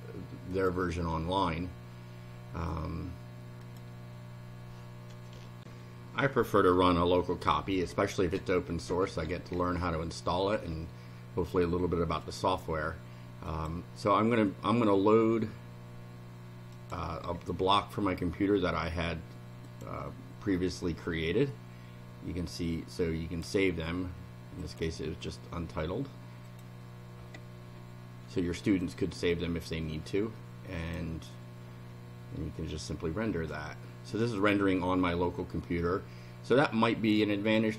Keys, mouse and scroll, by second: 0.5 click, 3.6 click, 5.6 ctrl+r, 12.2 click, 13.5 click, 16.7 click, 19.6 click, 21.5-23.6 drag, 24.6 click, 26.5 click, 28.8 click, 30.8 click, 37.2-37.7 drag.